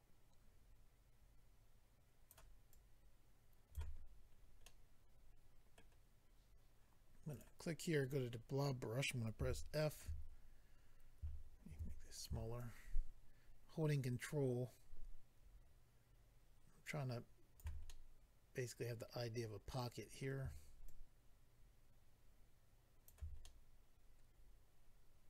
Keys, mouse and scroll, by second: 2.7 shift+click, 3.9-4.3 scroll down 4, 4.6 middle click, 4.6-5.2 scroll down 2, 6.3-6.7 scroll up 1, 7.3 click, 8.0 click, 8.5 scroll up 1, 9.4 f, 9.8 click, 11.7 ctrl+f, 12.1 click, 12.2 click, 12.6 ctrl+click, 17.9 middle click, 20.8 ctrl+click, 23.4 middle click.